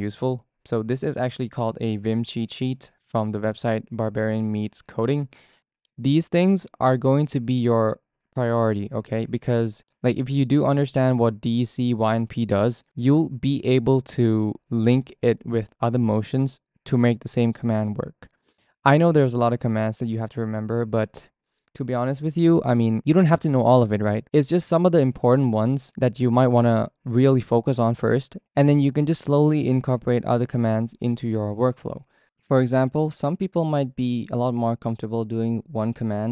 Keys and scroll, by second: 33.0-34.0 typing.